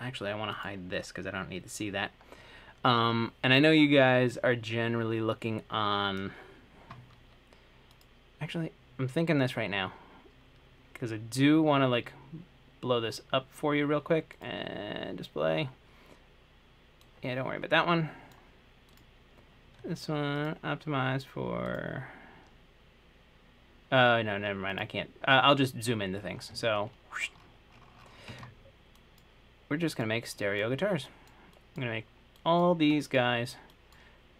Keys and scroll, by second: 17.8 Escape.